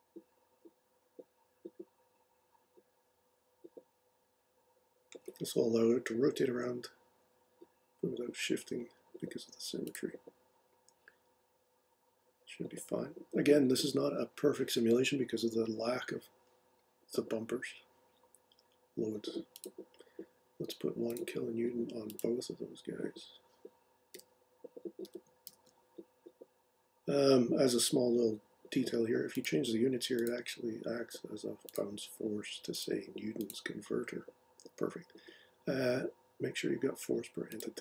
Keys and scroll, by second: 24.1-25.9 typing.